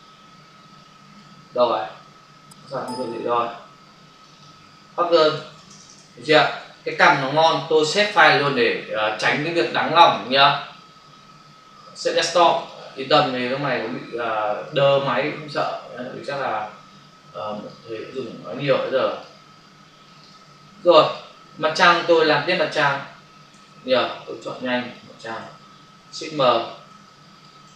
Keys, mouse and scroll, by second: 0.7 click, 4.1 click, 4.3 double click, 5.3-5.7 typing, 6.8 Return, 7.9 ctrl+s, 10.1 click, 12.5 click, 14.5 click, 17.5 click, 18.4 click, 19.0 click, 20.1 click, 21.0 click, 23.5 m, 24.2 click, 25.4 ctrl+d, 26.5 m, 27.0 click, 27.6 right click.